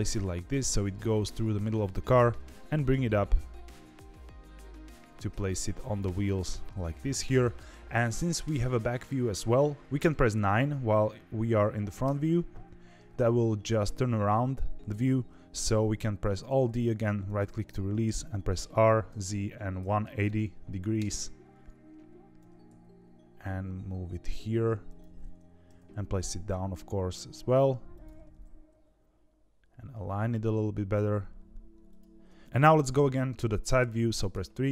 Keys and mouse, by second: 2.3 g, 12.0 KP_9, 16.4 alt+d, 18.5 r, 22.3 g, 25.6 g, 28.3 g, 34.3 KP_3.